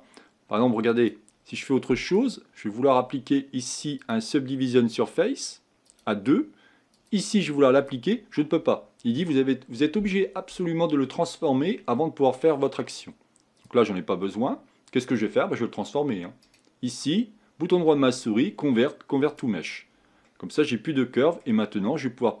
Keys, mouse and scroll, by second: 0.9-5.0 drag, 5.8-11.9 drag, 11.9-13.6 middle drag, 13.6 click, 14.2-16.4 middle drag, 16.4-19.4 right drag, 19.9-20.2 scroll down 2, 20.2-22.4 middle drag.